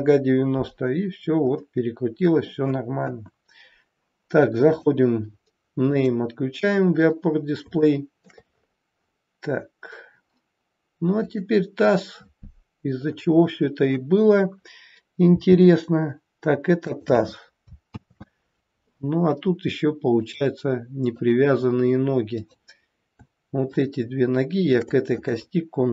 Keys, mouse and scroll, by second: 0.8-1.6 scroll down 3, 1.6 middle click, 3.0 KP_1, 4.6 click, 5.8 click, 7.3 scroll down 3, 7.8 shift+middle click, 8.5-8.8 scroll up 3, 8.8-10.5 scroll down 1, 11.1 click, 12.8-13.9 scroll up 4, 15.3 g, 17.8 ctrl+z, 20.1 click, 22.3 click, 23.6 shift+click, 24.5 shift+click, 25.8 ctrl+p.